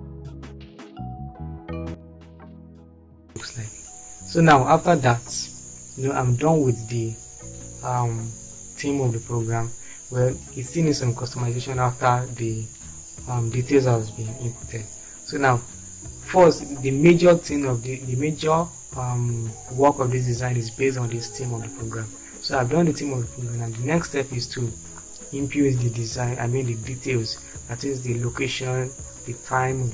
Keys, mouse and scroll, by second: 1.2 Right, 2.0 ctrl+g, 2.4 shift+F5, 3.1 shift+F4, 3.5 shift+F4.